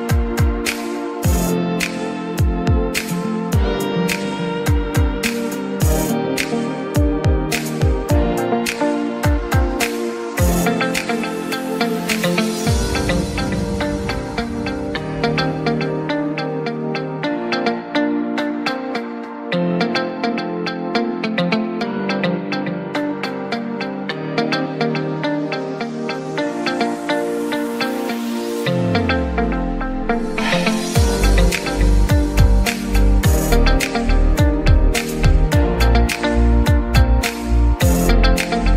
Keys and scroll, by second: 2.0-3.5 typing, 4.5 Escape, 9.2 Escape, 10.2 ctrl+x, 12.2 Escape, 22.4 Escape, 22.9 0, 23.3 5, 29.4 Escape.